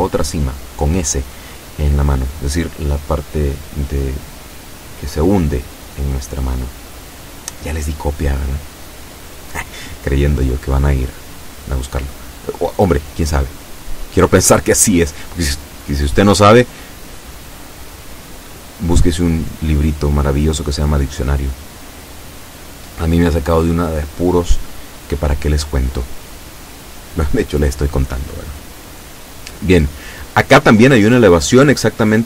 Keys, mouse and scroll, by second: 0.4-2.6 shift+middle drag, 2.9 shift+right click, 4.3 KP_7, 5.4 middle click, 7.2-8.7 drag, 8.7 ctrl+z, 9.6 o, 10.3-13.0 drag, 13.0-13.5 scroll up 2, 13.5-14.3 scroll down 4, 16.0 KP_7, 26.3 o, 27.1 right click, 28.0 shift+right click, 28.5-30.4 shift+middle drag, 30.9 scroll up 2, 31.6 KP_7.